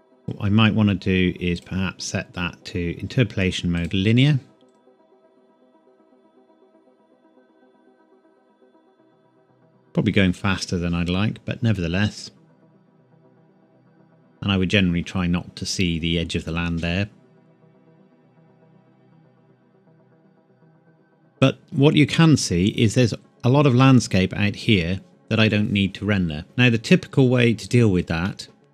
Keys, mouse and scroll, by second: 0.1 click, 1.5 right click, 3.7 click, 21.3 click, 21.9 scroll down 1, 27.6 click, 28.0 click, 28.2 middle click.